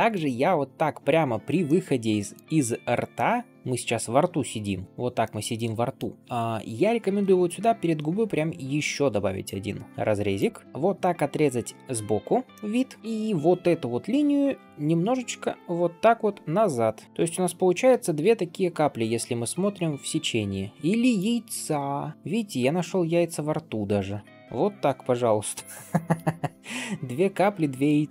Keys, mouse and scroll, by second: 0.0 middle click, 0.6-1.1 scroll up 3, 1.5 middle click, 2.4-3.0 scroll down 2, 3.0-4.8 middle drag, 4.8 scroll up 3, 5.1 middle click, 5.7 shift+middle click, 6.8 ctrl+r, 10.6 middle click, 10.6 alt+b, 12.4 middle click, 13.0 ctrl+KP_3, 13.0 scroll up 2, 14.9 g, 18.0-21.1 drag, 21.1-22.1 d, 22.1-23.8 drag, 23.8 d, 23.9 d, 24.1-24.4 scroll down 2, 24.1 d, 24.4-25.0 scroll up 2, 25.9 d, 26.0-27.7 right drag, 27.7 d.